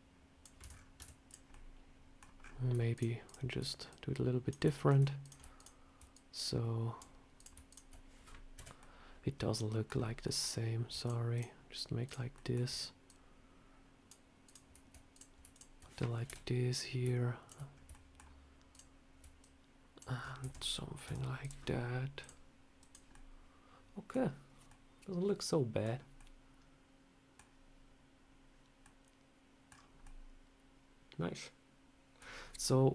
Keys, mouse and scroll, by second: 0.5 Tab, 0.6 scroll down 4, 0.9 Tab, 1.2 click, 1.4 middle click, 2.3 scroll up 3, 2.8 shift+click, 2.8 scroll up 1, 3.8 shift+click, 4.6 shift+middle click, 5.1 click, 5.5 shift+click, 6.0 click, 7.2 click, 7.3 shift+click, 7.6 shift+click, 8.5 Delete, 8.7 middle click, 10.1 middle click, 10.9 shift+click, 12.2 shift+click, 12.2 shift+middle click, 12.4 shift+middle click, 12.9 click, 14.3 click, 15.4 shift+click, 15.5 shift+click, 16.2 Delete, 16.6 click, 17.3 shift+click, 17.6 scroll up 2, 17.8 shift+middle click, 18.6 shift+click, 19.3 click, 20.1 scroll down 4, 20.3 Tab, 20.5 middle click, 20.9 Tab, 21.3 click, 22.1 click, 23.0 middle click, 24.6 middle click, 26.0 middle click, 28.7 middle click, 29.6-30.1 scroll down 3, 29.9 middle click, 32.1 scroll down 1, 32.3 scroll up 3, 32.5 middle click.